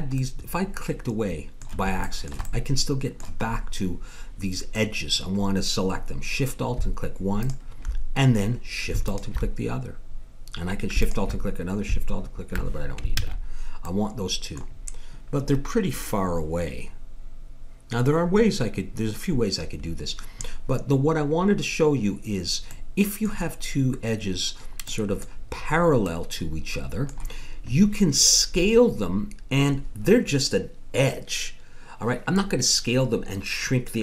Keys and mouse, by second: 0.2 middle click, 2.4 middle click, 7.4-10.8 drag, 11.0-12.8 drag, 13.2 ctrl+z, 13.9 middle click, 14.2 middle click, 22.2-30.9 middle drag.